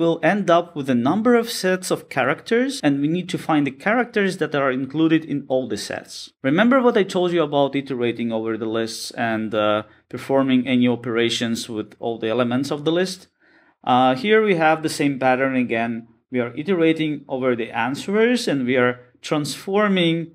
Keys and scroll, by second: 6.6 Escape, 7.2 Escape, 7.3 shift+super+Return, 11.3 Tab, 14.9 Return.